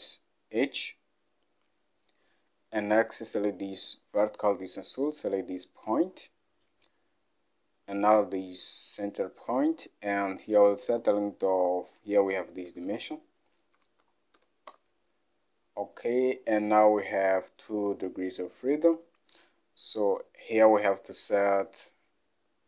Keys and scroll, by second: 10.2 alt+Tab, 13.8-14.4 typing, 14.8 Return.